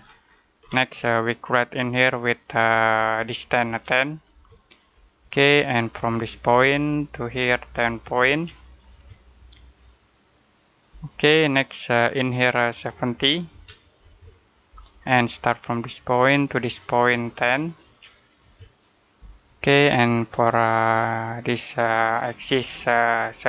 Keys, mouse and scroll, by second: 0.1-0.4 scroll up 1, 1.7 click, 3.5-4.2 typing, 4.8 Return, 5.8 click, 8.1 typing, 10.8 Return, 11.9 click, 13.4 typing, 14.6 Return, 16.1 click, 17.7-18.3 typing, 19.0 Return, 20.4 click.